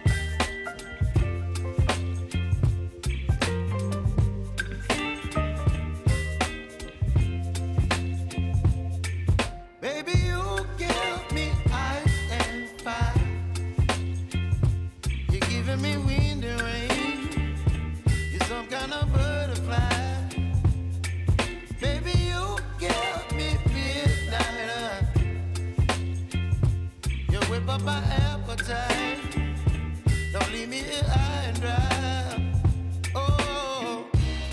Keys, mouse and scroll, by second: 1.6 ctrl+v, 2.1 space, 3.5 click, 5.2 ctrl+v, 5.6 u, 6.8 click, 7.6 typing, 9.2 click, 11.4 [, 12.7 click, 13.6 [, 14.1 space, 16.3 space, 17.4 click, 17.8 u, 18.8-20.2 drag, 20.4 click, 25.2 ctrl+shift+c, 25.8-29.5 typing, 31.8-33.1 drag, 33.1 ctrl+d, 33.8 [, 34.2 space.